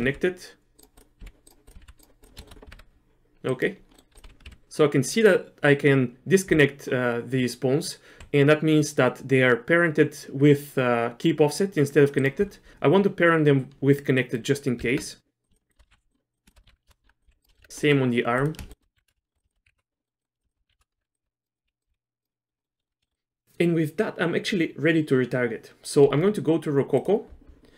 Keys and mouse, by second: 0.0 r, 1.2 r, 1.7 click, 1.8 r, 2.4 shift+middle click, 2.7 r, 3.9 click, 4.2 f, 4.4 g, 8.2 g, 14.2 click, 14.3 middle click, 14.8 Tab, 15.9 ctrl+p, 16.3 click, 16.6 ctrl+p, 17.0 Tab, 17.2 click, 17.3 g, 17.5 shift+click, 17.7 Tab, 17.8 middle click, 18.4 click, 18.9 ctrl+p, 19.3 shift+click, 19.6 ctrl+p, 20.0 click, 20.2 click, 20.4 click, 20.5 shift+click, 20.7 ctrl+p, 21.0 Tab, 21.1 click, 21.2 r, 21.6 r, 22.3 middle click, 22.3 r, 22.6 middle click, 22.8 shift+middle click, 23.1 middle click.